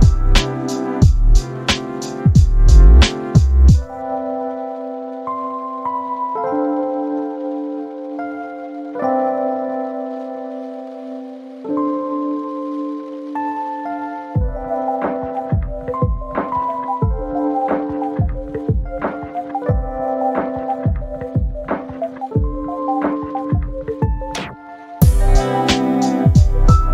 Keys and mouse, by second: 0.8 click, 1.4 click, 2.1 click, 2.6-3.2 drag, 3.8 click, 4.4 click, 5.6 click, 6.2 click, 6.9 click, 11.7 click, 13.0 click, 13.5 space, 15.8 F12, 18.0 click, 19.2 ctrl+shift+click, 21.0 =, 21.4 space, 22.9 ctrl+z, 23.9 ctrl+z, 24.8 ctrl+shift+click, 26.6 click.